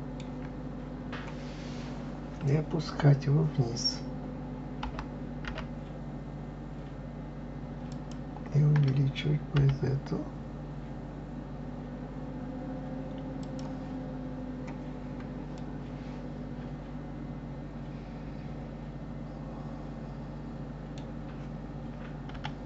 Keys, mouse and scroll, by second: 0.7-1.3 scroll up 2, 1.5-3.5 scroll down 1, 14.4-14.8 scroll up 1, 15.5-18.5 middle drag, 22.3 KP_7.